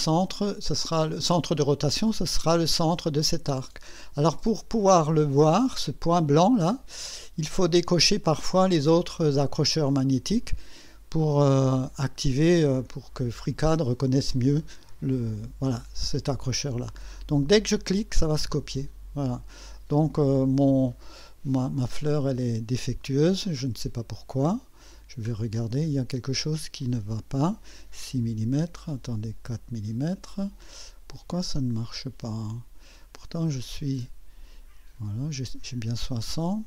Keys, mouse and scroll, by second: 18.1 click, 19.3-19.6 scroll up 1, 22.0 click, 24.3 click, 25.2-25.6 scroll up 1, 29.4-30.5 drag, 31.9-32.6 drag.